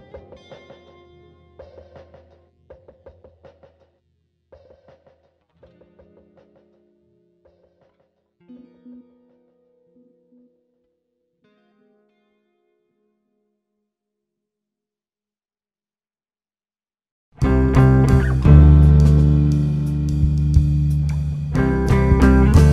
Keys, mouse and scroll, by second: 0.0 `, 0.7 `, 0.9 scroll up 2, 1.5 scroll up 2, 2.5-3.0 scroll up 2, 3.5 click, 4.0 shift+click, 4.7 x, 5.2 click, 5.8 `, 6.3 scroll down 1, 7.2 `, 8.3 click, 9.3 x, 11.0 `, 11.5 click, 11.6 Tab, 11.9 click, 12.7 x, 13.4 `, 14.4-14.9 scroll up 1, 14.9 click, 15.7 x, 16.0 click, 16.3 x, 16.9 Tab, 17.1 scroll down 1, 17.4 `, 20.3 click, 20.8 KP_Decimal, 21.3-21.8 scroll down 2, 21.8 `, 22.2-22.5 scroll down 1.